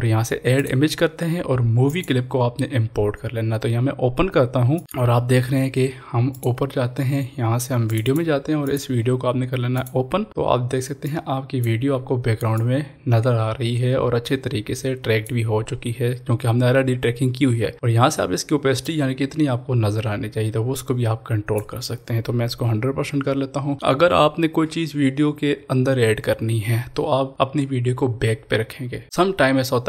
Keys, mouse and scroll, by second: 3.0-4.7 scroll down 1, 4.7 click, 6.3-17.5 drag, 17.5-18.8 scroll down 1, 18.8-23.7 drag.